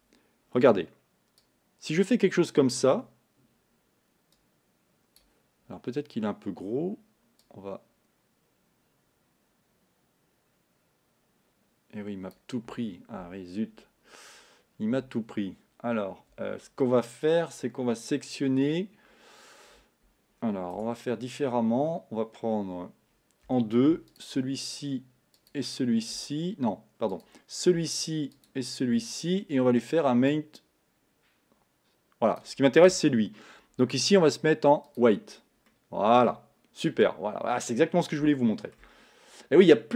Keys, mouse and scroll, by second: 3.0-10.5 drag, 16.9-21.0 middle drag, 21.0 Tab, 23.7 2, 24.3 shift+click, 25.5 shift+click, 27.5 click, 30.6-35.1 drag, 35.7 middle click, 36.6-37.1 scroll up 1, 37.1 scroll up 1, 37.8-38.3 scroll down 1, 38.3 shift+middle click, 39.0-39.7 scroll up 1, 39.7-39.9 middle drag.